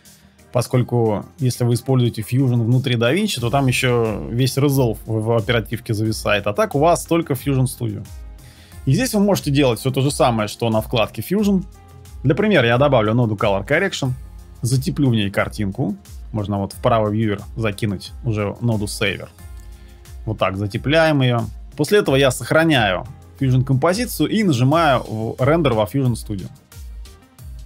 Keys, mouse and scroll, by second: 11.6 shift+space, 13.6 BackSpace, 23.2 ctrl+s.